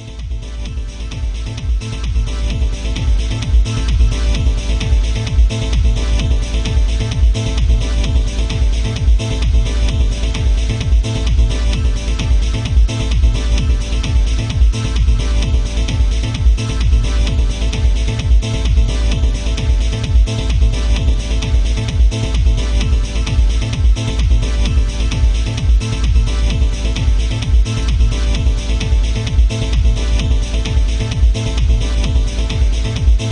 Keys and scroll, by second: 4.5 ctrl+z, 7.2 ctrl+z, 9.8 alt+space, 11.2 ctrl+z, 20.1 ctrl+z, 28.1 ctrl+z.